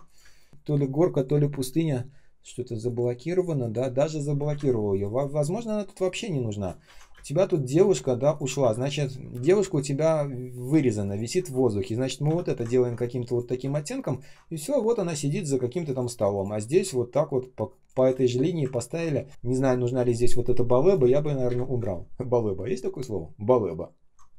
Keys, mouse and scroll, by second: 0.1 space, 0.5 ctrl+click, 4.4 Delete, 5.4 shift+click, 6.8 ctrl+я, 7.0 space, 7.5 space, 7.6 space, 7.9-8.5 ctrl+scroll down 1, 8.5 k, 9.3 ctrl+я, 9.6 ctrl+click, 9.8 ctrl+scroll up 1, 10.5 ctrl+scroll down 1, 10.9 ctrl+click, 12.6 ctrl+scroll up 1, 13.7 ctrl+scroll down 1, 14.0 ctrl+click, 16.3 shift+click, 21.4 Delete.